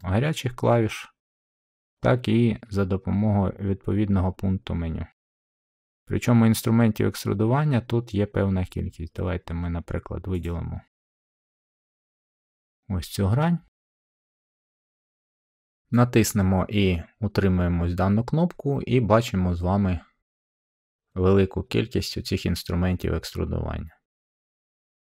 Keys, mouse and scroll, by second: 1.6 middle click, 10.3-11.4 drag, 11.6-12.7 middle drag.